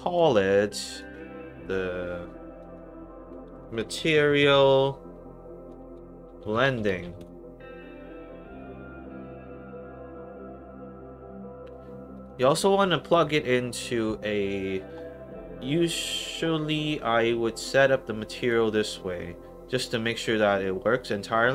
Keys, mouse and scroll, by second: 0.7 click, 0.8 click, 2.5 click, 3.3-7.5 typing, 8.5 click, 9.9 middle click, 10.1-10.6 scroll down 2, 10.6 middle click, 11.6 scroll up 2, 12.1 click, 18.3 click.